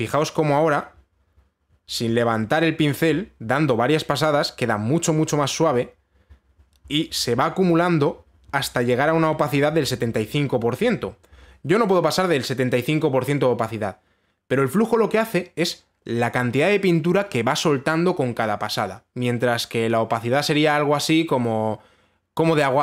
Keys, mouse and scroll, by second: 0.1 click, 8.3 right click.